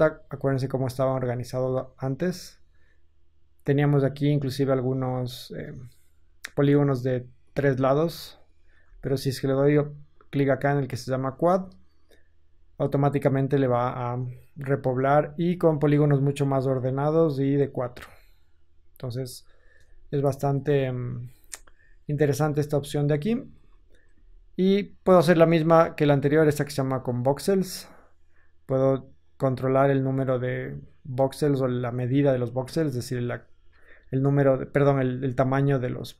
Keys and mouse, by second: 1.2 Tab, 3.8 click, 4.0-5.5 ctrl+middle drag, 5.5 click, 5.6-6.7 middle drag, 6.7 click, 7.4 middle click, 7.8 click, 7.9 middle click, 8.1 click, 8.2 middle click, 8.3 click, 8.4-10.1 middle drag, 8.7 Tab, 10.1-25.8 drag, 17.8 Tab, 19.7 KP_1, 22.4 Tab, 23.4 ctrl+z, 24.0 ctrl+z, 25.8-28.5 middle drag, 28.5-36.1 drag.